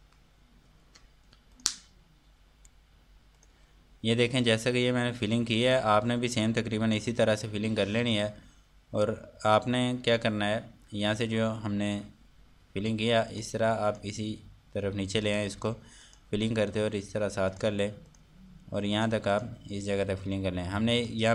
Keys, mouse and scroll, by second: 2.1 click, 4.0 click, 6.4 scroll up 1, 10.6-12.7 scroll down 1, 13.9 click.